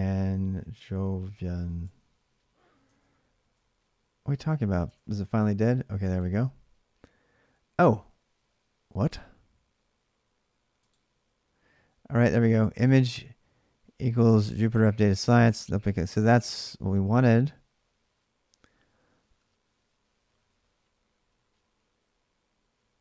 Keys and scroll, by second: 0.0-3.3 typing, 4.6 alt+Tab, 4.6 typing.